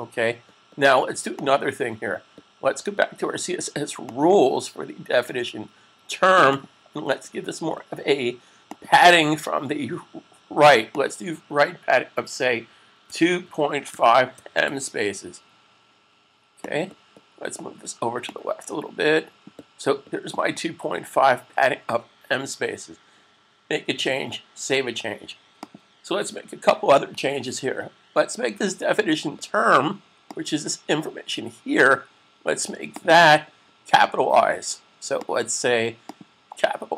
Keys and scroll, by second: 12.9-15.1 typing, 24.4 super+s.